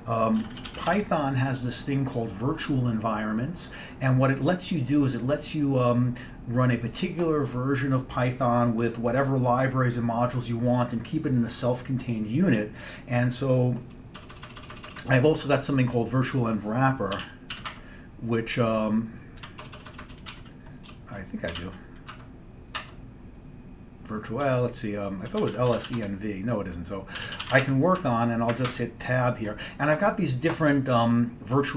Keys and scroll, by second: 0.2-1.5 typing, 14.3 BackSpace, 14.4 BackSpace, 14.6 BackSpace, 14.7 BackSpace, 17.0-18.1 typing, 19.5-22.2 typing, 22.9 Tab, 24.5-28.8 typing, 28.8 Tab.